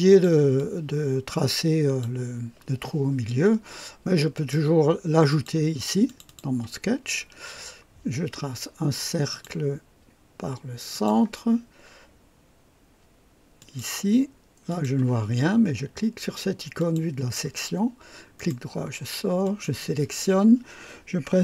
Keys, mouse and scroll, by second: 0.5-2.2 drag, 1.2 typing, 4.3 click, 5.3 click, 6.0 click, 7.1-7.6 scroll up 3, 9.3 click, 10.9 click, 11.9-12.8 typing, 13.6 click, 14.7 click, 16.7 click, 18.3 right click, 19.4 click.